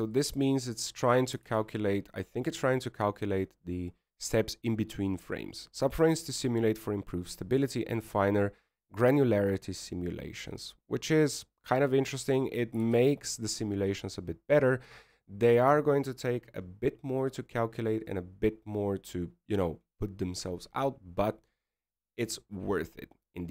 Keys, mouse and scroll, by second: 0.9-1.3 scroll down 1, 1.3 click, 1.8 click, 2.2 click, 3.6 alt+a, 14.1 click, 14.3 click, 14.9 alt+a, 16.7 scroll up 3, 17.5-18.0 scroll down 2, 19.0-19.6 scroll down 1, 19.6 scroll up 1.